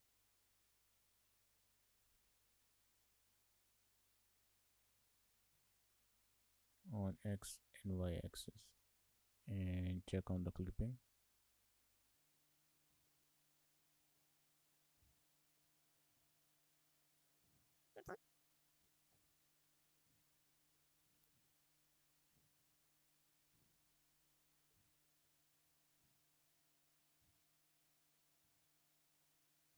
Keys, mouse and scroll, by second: 0.3 shift+middle click, 4.1 click, 5.2 shift+middle click, 6.4 click, 10.1 click, 12.3-12.9 scroll up 6, 12.4 shift+middle click, 12.9 alt+click, 13.1 scroll down 2, 13.3 shift+middle click, 13.7 click, 14.2 click, 15.0 click, 15.7 alt+click, 17.1 click, 17.3 scroll down 5, 17.4 shift+middle click, 17.7 click, 17.9 shift+middle click, 18.5 click, 18.6 click, 18.9 shift+middle click, 19.8 scroll up 5, 20.0 middle click, 20.5-20.9 scroll down 6, 20.6 shift+middle click, 20.9 middle click, 23.4 click, 23.6-24.3 scroll up 5, 23.8 shift+middle click, 24.0 shift+middle click, 24.3 shift+middle click, 25.0 click, 25.3 1, 25.5-26.6 scroll up 4, 25.6 shift+middle click.